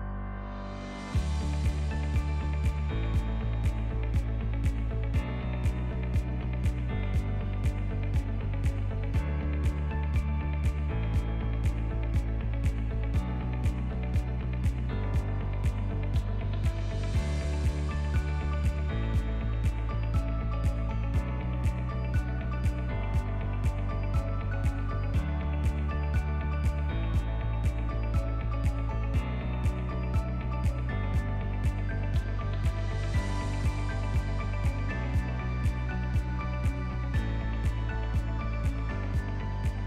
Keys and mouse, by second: 1.1 middle click, 1.5 /, 2.3-2.7 shift+middle drag, 3.1 drag, 3.7-5.5 drag, 4.4 o, 6.0 middle drag, 6.7 click, 10.7 click, 11.3 click, 12.1 middle click, 13.2-17.1 drag, 18.1-21.7 drag, 22.2 middle click, 22.9 click, 23.7 ctrl+t, 24.2 middle click, 27.2-28.9 drag, 29.6 middle click, 30.2-31.6 drag, 32.5-34.1 drag, 34.8 ctrl+middle click, 35.7-36.2 middle drag, 36.5 shift+middle click, 38.9-39.8 shift+drag.